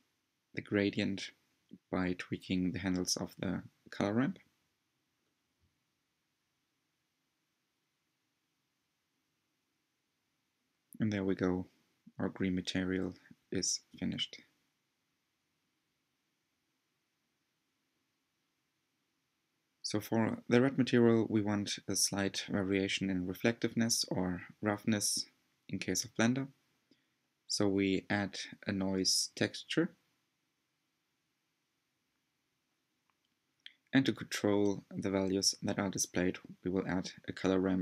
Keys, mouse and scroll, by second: 0.5 click, 3.1-5.7 scroll down 3, 5.7-9.3 scroll down 1, 5.9 click, 9.3 scroll down 1, 10.1 scroll up 1, 10.3-10.7 scroll down 2, 11.0-15.1 middle drag, 15.9-16.5 scroll down 6, 16.7-17.9 shift+middle drag, 17.9 click, 19.0-20.8 drag, 26.3 click, 26.6 shift+a, 37.1-37.8 drag.